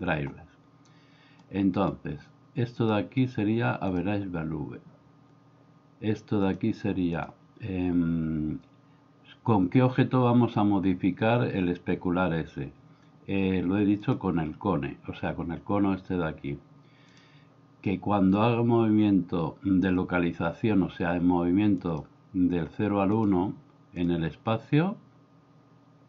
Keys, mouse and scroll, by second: 1.4 click, 2.7-4.0 drag, 6.5-14.2 drag, 17.1-22.1 drag, 23.2-24.1 drag.